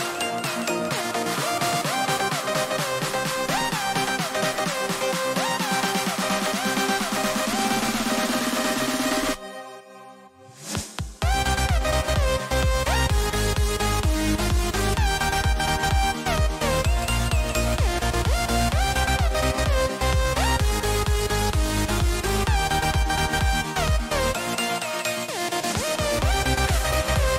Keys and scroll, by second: 1.7 ], 1.9 ], 3.2 [, 19.0 ctrl+-, 19.6 ], 19.7 ].